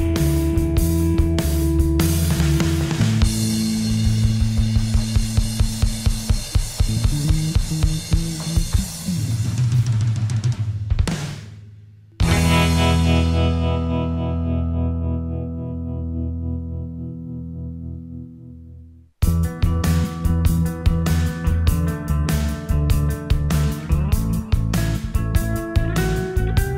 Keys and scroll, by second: 3.5 ctrl+t.